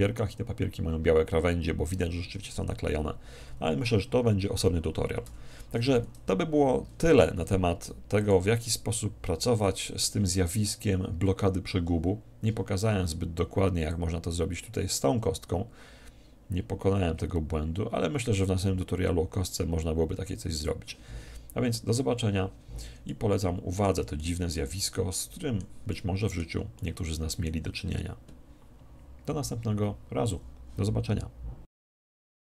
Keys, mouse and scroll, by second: 8.3-9.9 drag, 14.1-15.7 drag, 23.3-28.7 middle drag.